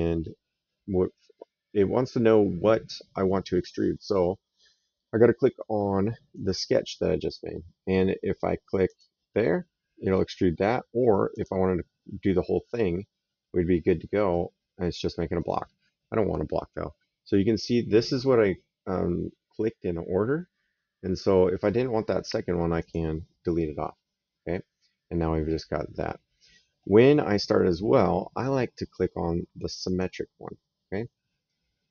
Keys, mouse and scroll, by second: 6.2 click, 8.7 click, 9.9 right click, 11.1 click, 14.1 right click, 22.6 click, 29.7 click, 31.3 right click.